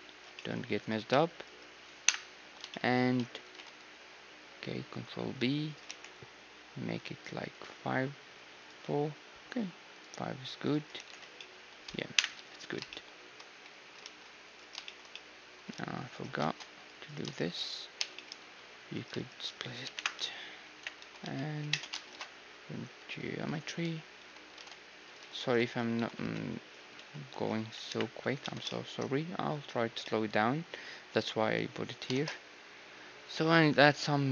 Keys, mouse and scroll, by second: 0.8-3.4 right drag, 2.0 KP_1, 2.4 z, 2.9 click, 3.4 ctrl+b, 3.4-4.8 middle drag, 5.9 t, 7.0-12.5 drag, 11.0 t, 11.0 z, 11.3-12.5 middle drag, 12.2 KP_1, 12.3 z, 13.5 z, 14.0 ctrl+r, 14.5-16.8 middle drag, 16.1 ctrl+r, 16.1-18.2 drag, 16.4 ctrl+Tab, 17.0-19.2 right drag, 18.0 j, 18.2-21.0 middle drag, 19.2 click, 19.8-21.2 typing, 21.7 Tab, 22.0 ctrl+alt+shift+c, 24.2 Tab, 25.2-27.8 typing, 28.4 Tab, 29.0-31.9 middle drag, 29.2 z, 32.2 shift+space.